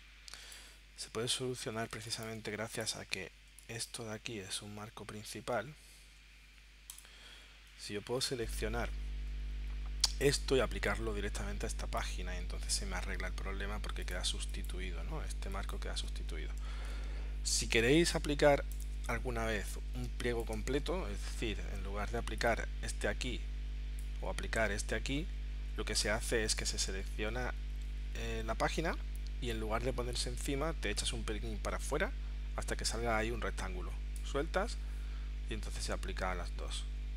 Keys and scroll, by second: 16.7 super+z, 18.0 super+z, 20.1 space.